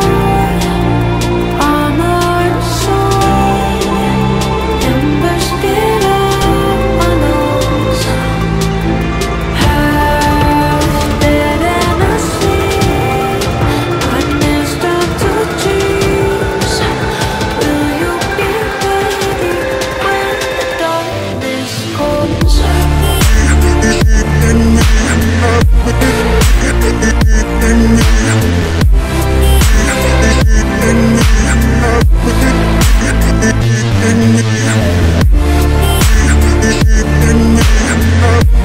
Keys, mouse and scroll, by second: 0.4 alt+scroll down 1, 0.9 alt+scroll up 1, 2.4 alt+scroll down 1, 3.1 ctrl+t, 4.1-4.7 alt+scroll down 2, 4.7 alt+scroll up 2, 6.3 ctrl+z, 7.6-8.2 scroll down 1, 9.1 ctrl+t, 11.6 alt+scroll down 1, 11.7 alt+scroll up 1, 11.8 alt+scroll down 1, 11.9 alt+scroll up 1, 12.1 alt+scroll down 1, 12.3-13.5 alt+scroll up 1, 13.5-14.2 scroll up 1, 14.2-15.2 scroll down 1, 15.2-15.5 scroll down 1, 15.6 ctrl+z, 18.6 ctrl+j, 20.4-20.9 scroll down 1, 24.5 ctrl+i, 24.8 ctrl+z, 28.9 double click, 32.7 ctrl+t.